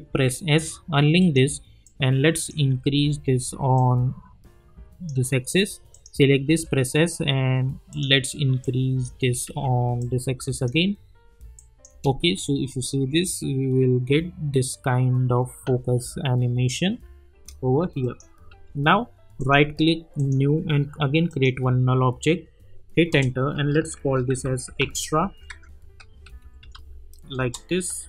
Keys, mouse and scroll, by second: 0.1 s, 1.2 click, 2.9 ctrl+z, 3.7-5.9 drag, 6.5 s, 7.9 click, 9.4 ctrl+z, 10.0-11.5 drag, 11.9 space, 17.3 space, 18.0 click, 18.5 u, 19.4 right click, 20.2 click, 23.1 Return, 23.3-27.2 typing, 25.5 ctrl+a, 27.4 Return.